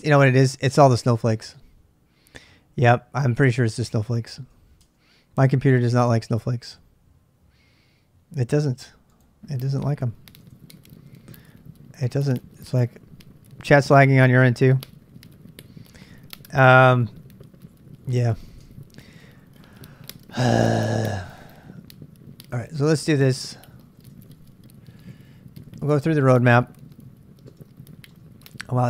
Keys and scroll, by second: 0.7 space, 1.4 q, 3.0-4.1 typing, 4.8 Return, 6.4 super+Tab, 10.2-10.9 typing, 16.8-20.6 typing, 19.7 ctrl+[, 22.3-28.1 typing.